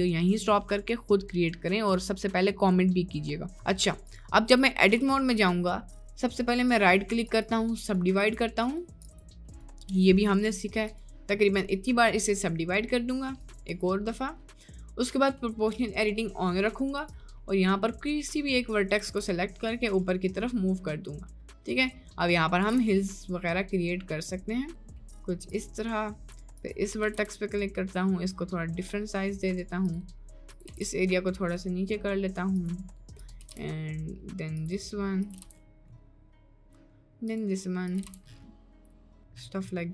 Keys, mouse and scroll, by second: 3.6 middle click, 4.9 Tab, 6.4-7.5 right drag, 7.8 right click, 8.7-10.0 right drag, 10.8 right click, 11.5 middle click, 12.5 middle click, 13.5 click, 14.3 middle click, 14.7 middle click, 17.1 click, 17.5 middle click, 18.2 click, 19.1 g, 22.6 g, 27.0 g, 30.5 click, 30.7 g, 33.5 g, 35.3 g, 38.1 g, 39.0 g.